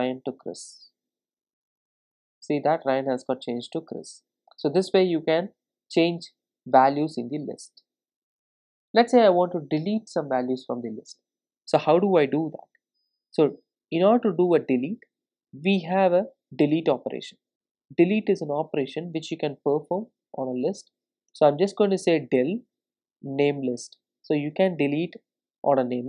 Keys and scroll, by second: 17.5 Return.